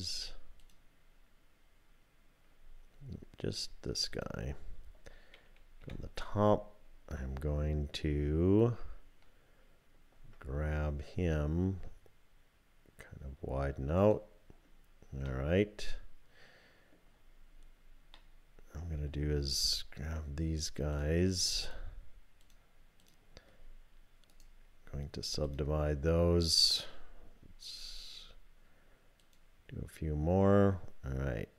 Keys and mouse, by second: 0.6 shift+click, 3.6-5.5 drag, 5.8 KP_7, 10.2 g, 15.3-17.0 drag, 18.2-19.2 drag, 20.9 click, 22.4 shift+click, 24.4-26.8 drag, 29.2 click.